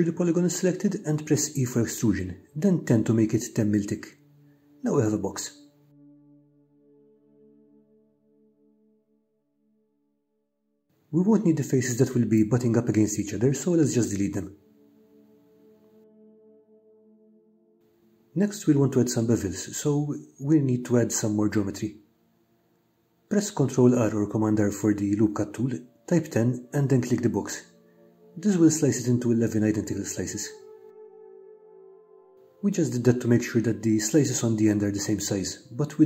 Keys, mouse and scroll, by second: 1.0 0, 3.0 Return, 3.9-6.2 middle drag, 7.5 3, 8.4 click, 8.9 middle click, 10.6 shift+click, 12.1 Delete, 14.5-17.3 middle drag, 18.2 ctrl+r, 28.8 click, 33.5 ctrl+click.